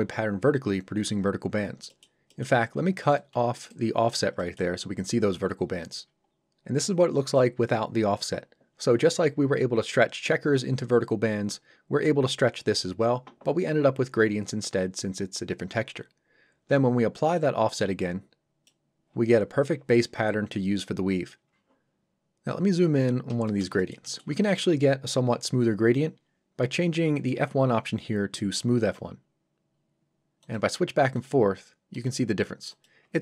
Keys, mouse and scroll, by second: 1.9 middle click, 3.2 ctrl+right click, 4.4 middle click, 4.9-6.3 scroll up 1, 17.4 click, 22.4 scroll up 1, 23.4 shift+scroll up 1, 23.5 shift+middle click, 27.2 click, 31.9 click.